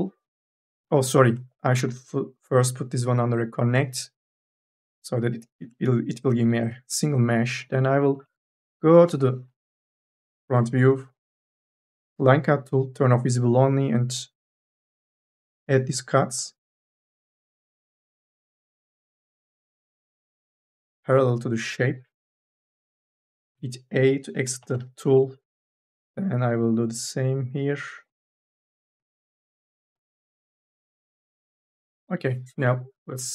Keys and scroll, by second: 1.1 ctrl+z, 4.7 c, 6.2 3, 6.4 e, 7.1 1, 9.0 1, 9.8 k, 23.3 e, 24.4 k, 31.6 space, 33.2 Delete.